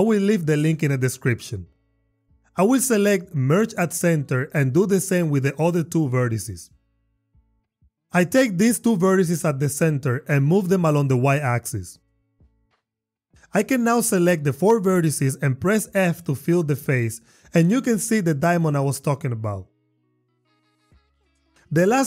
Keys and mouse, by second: 3.3 click, 4.7 m, 8.0 click, 10.1 g, 10.5 y, 12.7 click, 13.1 click, 13.6 shift+click, 15.0 shift+click, 15.9 f, 16.9 click, 17.7 shift+click, 18.9 shift+click, 19.2 f.